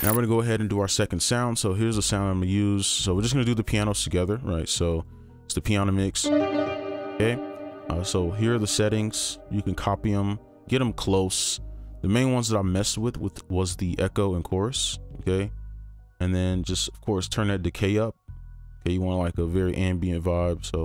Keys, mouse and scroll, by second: 6.2 typing, 8.0 typing, 20.7 typing.